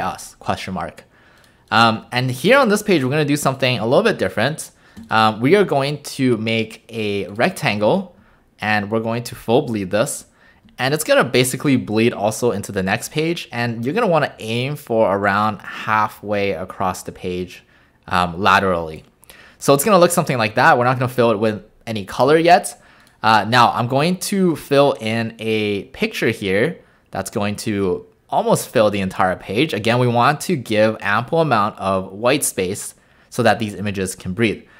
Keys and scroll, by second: 0.0-0.2 typing, 1.5-2.6 typing.